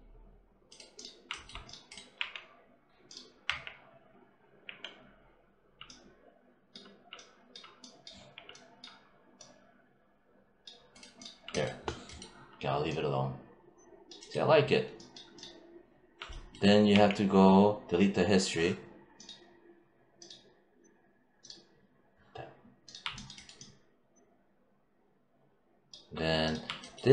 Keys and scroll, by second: 2.0 4, 3.3 5, 4.5 4, 8.0 6, 16.7 w.